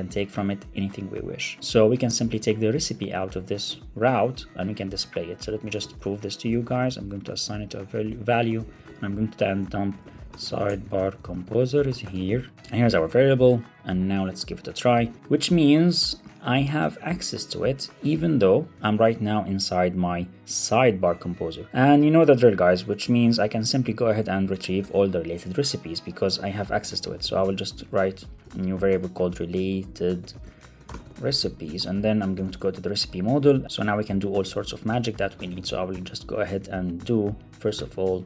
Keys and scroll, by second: 2.9 super+Right, 3.5 super+Left, 3.8 shift+super+Right, 4.4 Left, 7.0 Left, 7.4 Left, 7.5 Left, 8.1 super+c, 8.2 super+Right, 8.4 Return, 12.5 super+v, 12.7 super+Right, 13.1 alt+super+l, 13.2 super+s, 15.0 super+r, 18.7 super+Tab, 22.6 Right, 22.9 alt+shift+Left, 23.3 super+c, 23.6 Right, 23.9 alt+shift+Left, 24.1 super+c, 24.3 Down, 24.5 super+Right, 24.7 Return, 32.8 Return, 34.9 alt+shift+Left, 35.9 super+v, 36.3 super+z, 38.0 Right.